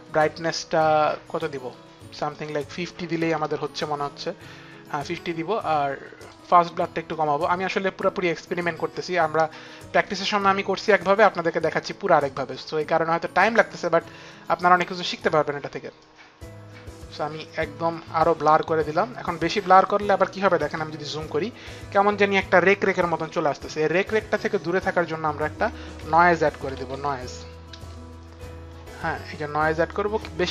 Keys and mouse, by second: 2.0 click, 2.8 KP_5, 3.0 KP_0, 3.1 Return, 5.8 click, 10.5 click, 13.2 click, 15.7 click, 24.4 click, 25.4-26.7 typing.